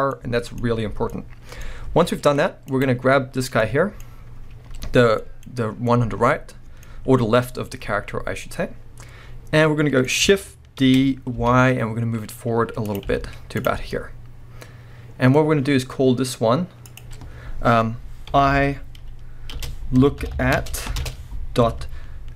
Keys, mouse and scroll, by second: 0.9 scroll down 1, 1.6-2.4 scroll up 2, 2.4 scroll up 1, 2.7 click, 3.3 scroll down 2, 3.6-12.9 middle drag, 4.1-5.2 scroll up 2, 10.8 shift+d, 12.9 click, 13.1 z, 13.8 scroll down 1, 13.9-16.8 middle drag, 16.8-22.3 drag, 20.3 o.